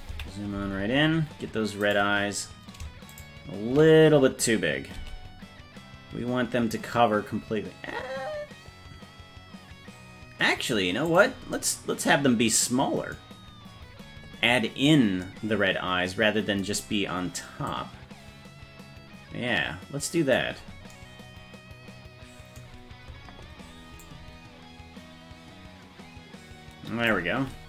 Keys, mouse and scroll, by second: 0.1 KP_Decimal, 0.7-1.2 scroll down 6, 1.9 right click, 1.9 scroll down 3, 3.3 shift+right click, 5.0 s, 17.7-20.4 drag, 24.0-27.1 drag.